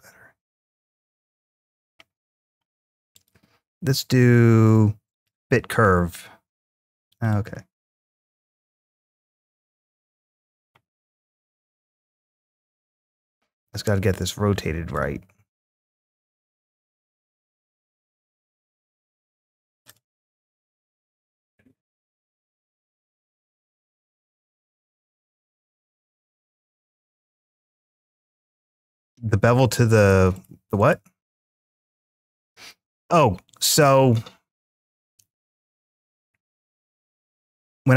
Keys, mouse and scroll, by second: 1.1 click, 2.9-5.1 drag, 7.1 click, 8.6 click, 11.6-14.8 drag, 15.5-19.7 drag, 20.1-22.1 drag, 22.5 ctrl+z, 24.2-25.8 drag, 26.2-27.2 scroll down 2, 27.8 click, 28.5 click, 29.8 click, 30.1 click, 30.6 click, 32.5-33.5 scroll down 1, 33.5 click, 35.7 shift+a.